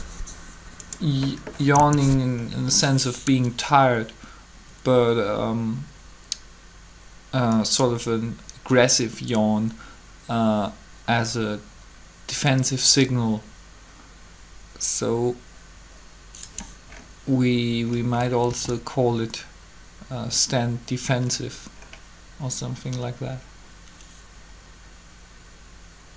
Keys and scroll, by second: 1.7 3, 18.5 alt+a.